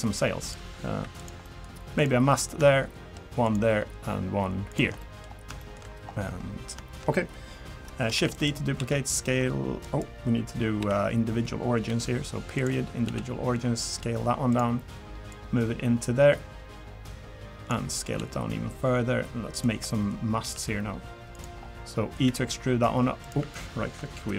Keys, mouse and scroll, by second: 0.4 click, 0.9 3, 1.2 click, 1.4 middle click, 2.0 click, 2.3 middle click, 3.4 shift+click, 4.9 click, 5.2 scroll down 2, 5.6 shift+middle click, 5.9-6.7 scroll up 1, 8.1 shift+d, 8.8 s, 10.8 ., 11.9 ., 13.0 s, 15.3 click, 18.2 s, 19.9 middle click, 20.1 scroll up 2, 20.4 s, 21.6-21.9 scroll down 3, 21.9 middle click, 22.3 e.